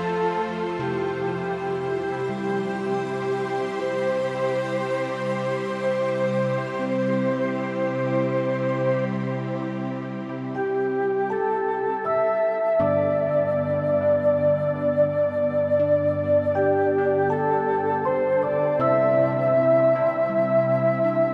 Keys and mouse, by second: 0.1 middle click, 1.2 Tab, 1.3 click, 1.6 middle click, 1.9 click, 2.1 middle click, 2.6 Tab, 2.8 middle click, 3.8 g, 5.4 Escape, 5.4 g, 6.7 z, 8.5 Escape, 9.3 g, 9.9 Escape, 10.2 middle click, 11.3 middle click, 12.4 shift+click, 12.9 middle click, 13.8 g, 14.3 z, 15.1 Escape, 15.5 middle click, 15.8 middle click, 16.8 shift+click, 17.3 g, 17.5 z, 19.0 middle click, 19.5 middle click, 20.3 click, 20.7 middle click.